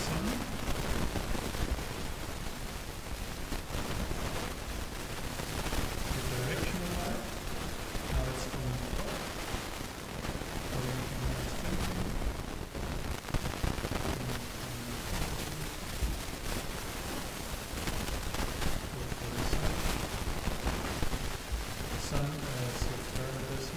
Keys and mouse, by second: 1.8 shift+a, 10.1-11.9 drag, 13.5-15.4 drag, 17.5-19.4 drag, 22.5-23.7 drag.